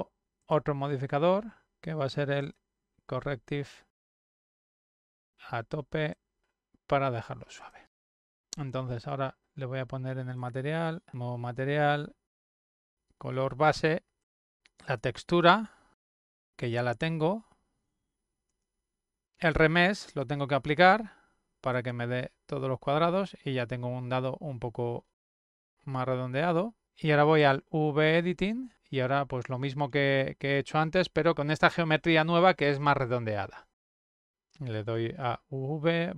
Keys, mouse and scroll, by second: 1.3 click, 2.2 click, 3.5 click, 4.7 click, 6.3 click, 7.7 click, 10.0 click, 10.8 click, 13.4 click, 14.9 click, 17.8 click, 18.9 click, 20.0 click, 21.7 click, 25.1 middle click, 25.1 scroll up 1, 27.2 click, 33.7 click, 34.9 click.